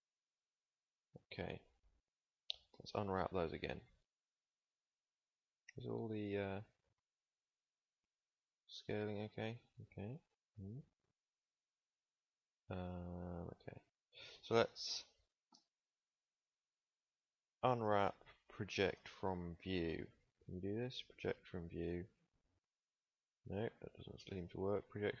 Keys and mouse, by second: 2.6 u, 15.4 KP_1, 17.5 u, 24.0 u.